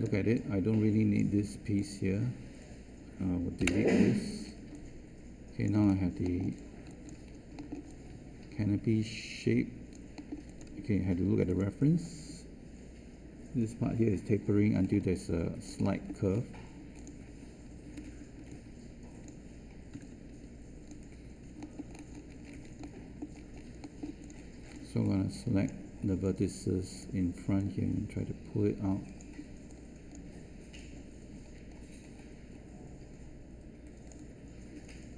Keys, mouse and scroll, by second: 3.5 Delete, 18.0 3, 19.9 space.